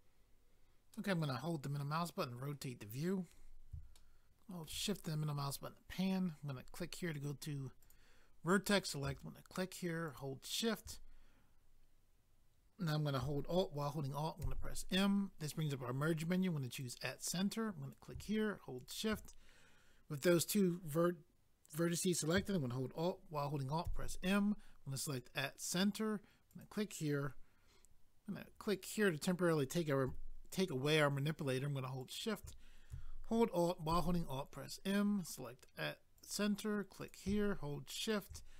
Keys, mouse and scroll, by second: 0.9 middle click, 3.3 scroll up 1, 5.3 scroll up 1, 7.1 click, 7.2 click, 7.8 click, 7.9 click, 8.7 click, 8.8 click, 10.0 shift+click, 10.2 shift+click, 14.4 alt+m, 16.7 click, 17.8 click, 18.8 shift+click, 23.8 alt+m, 25.1 click, 26.5 click, 28.7 click, 28.9 click, 32.0 shift+click, 32.1 shift+click, 33.9 alt+m, 36.2 click, 36.2 click, 37.0 click, 37.1 click, 38.0 shift+click, 38.1 shift+click.